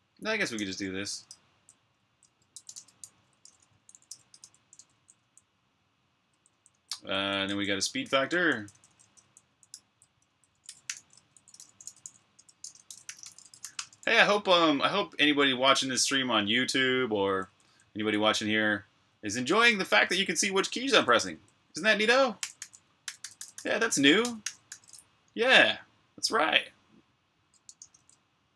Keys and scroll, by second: 0.0-14.2 typing, 16.0 typing, 17.0-21.3 typing, 22.4-24.6 typing, 27.3-28.5 typing.